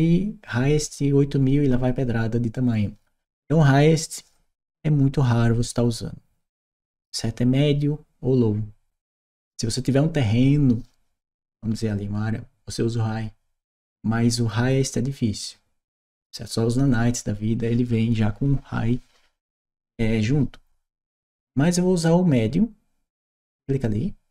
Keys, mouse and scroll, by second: 22.9 click.